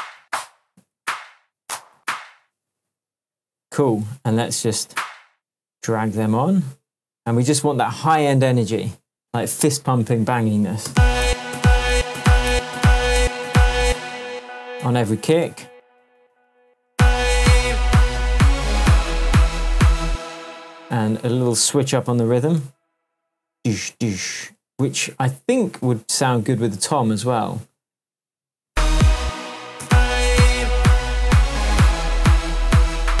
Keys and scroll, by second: 0.1 Up, 0.9 Down, 1.9 Up, 10.8 space, 15.6 super+d, 16.9 super+space, 17.6 space, 20.0 space, 28.6 space.